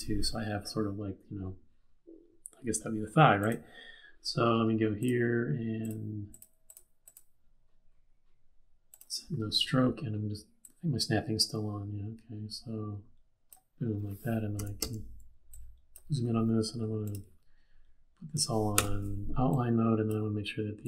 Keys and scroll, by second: 14.6 z, 14.7 z, 18.7 v.